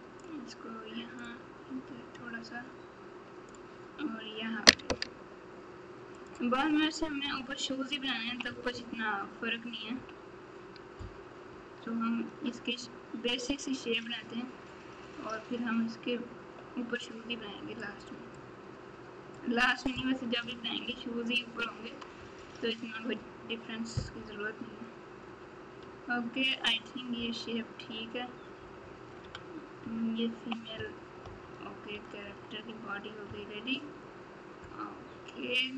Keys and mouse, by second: 1.1-3.5 drag, 7.2 KP_7, 8.2 KP_2, 9.9 KP_1, 17.8 click, 18.3-19.3 drag, 28.6 KP_Subtract, 31.9 KP_Subtract, 32.2 KP_Subtract, 33.2 KP_3.